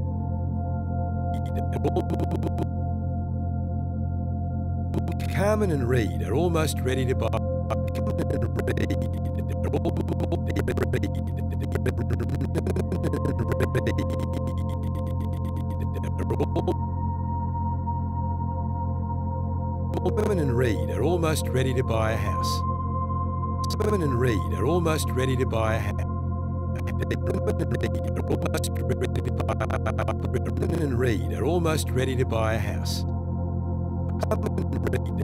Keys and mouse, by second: 0.2-2.6 drag, 3.0 g, 3.6-4.3 drag, 4.9 click, 5.2 space, 7.2 space, 7.7 click, 18.2-18.6 typing, 19.4-20.2 drag, 20.2 typing, 22.6 space, 23.6 click, 23.8 space, 25.9 space, 26.7-30.5 drag, 30.7 d, 33.1 space, 34.0-35.2 drag.